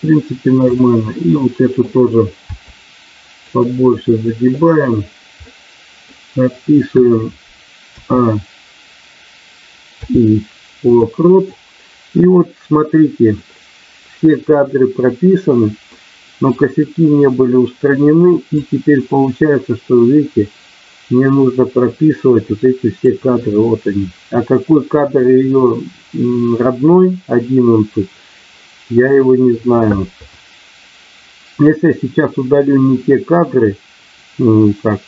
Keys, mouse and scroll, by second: 0.6 click, 1.4 middle click, 2.5 r, 3.4 click, 3.9 middle click, 5.4 middle click, 9.9 i, 16.0 middle click, 18.6-23.0 drag.